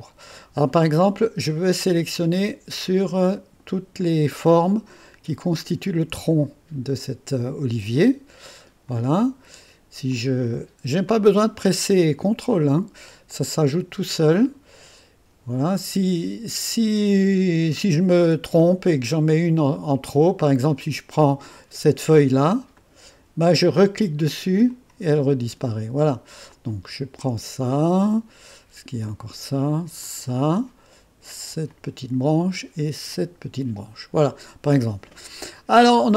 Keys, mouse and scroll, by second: 1.6 click, 2.7 click, 4.5 click, 5.5-8.3 drag, 8.9 click, 10.1 click, 11.1 click, 12.4 click, 13.0-13.8 scroll up 1, 14.1 click, 15.5 click, 18.5 click, 22.7 click, 24.6 click, 26.5 click, 29.0 click, 30.0 click, 31.6 click, 33.1 click.